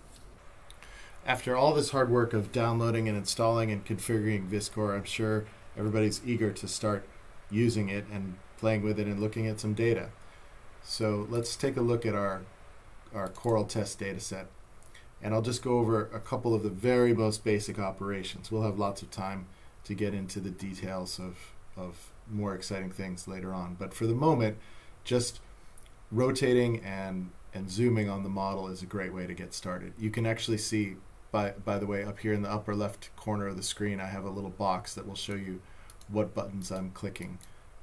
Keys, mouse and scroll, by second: 11.4 click, 13.3 click, 35.2 click.